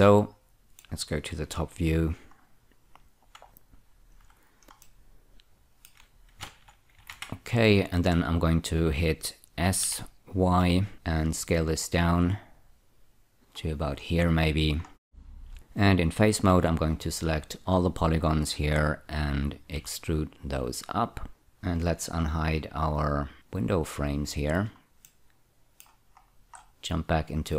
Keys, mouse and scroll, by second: 0.2 middle click, 1.9 F2, 3.3 click, 5.1 middle click, 6.8 ctrl+<, 7.4 ctrl+<, 8.1-9.3 scroll down 1, 10.1 s, 10.9 y, 13.4 click, 13.9-14.7 scroll up 2, 15.1-15.5 scroll up 1, 15.5 Tab, 16.8 a, 17.7-19.8 scroll down 4, 20.1 4, 21.3 click, 23.7 click, 25.4 middle click, 26.6 scroll up 1, 26.6 Tab.